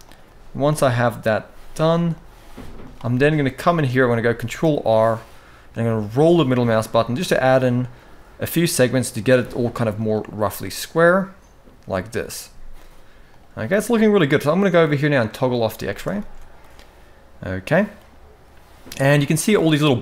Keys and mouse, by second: 0.0 g, 0.9 click, 1.1 g, 2.1 g, 3.1 shift+middle click, 4.1 ctrl+r, 10.4 middle click, 12.2 z, 13.5 middle click, 15.1 click, 15.6 shift+middle click, 15.9 alt+a, 16.3-17.6 middle drag, 19.8 middle click.